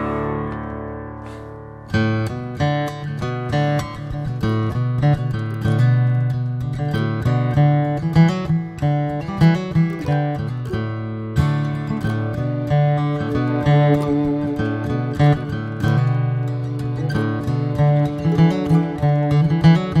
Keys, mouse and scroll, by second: 0.3 scroll up 1, 0.7 Tab, 1.0 scroll up 2, 1.4 click, 2.0 click, 4.9 r, 6.5 click, 7.9 r, 9.3 click, 10.6 shift+middle click, 11.0 click, 12.2 s, 19.0 click.